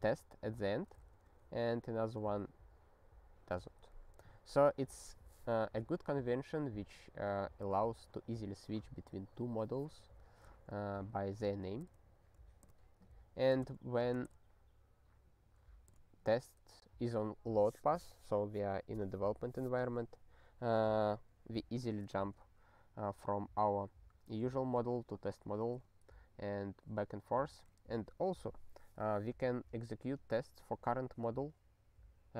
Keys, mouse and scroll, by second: 1.3 super+b, 3.9 super+b, 11.8 super+w.